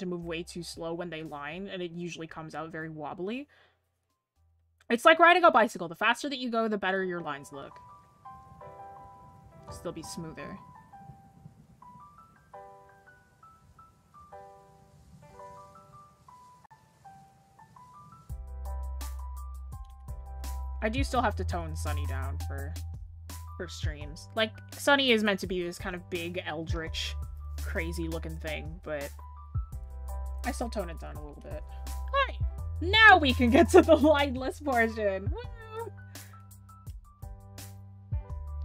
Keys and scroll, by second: 31.7-32.3 scroll down 1.